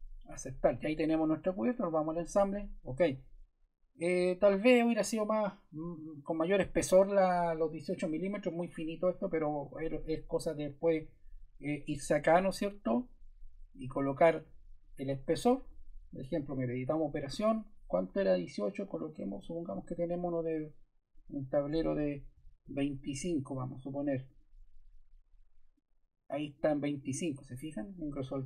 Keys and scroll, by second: 22.3 shift+2, 22.6 shift+5.